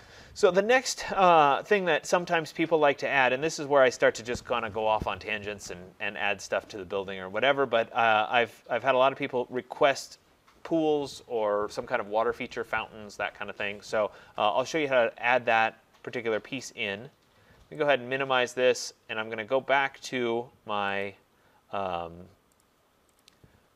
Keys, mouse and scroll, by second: 18.0 click, 21.1 click, 22.7 click.